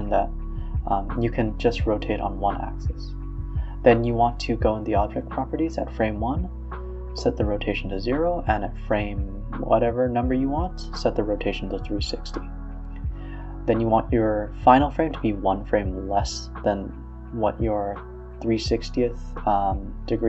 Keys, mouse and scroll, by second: 7.3-9.5 drag, 14.1 t, 16.1 space, 16.5 a, 17.6-19.5 typing.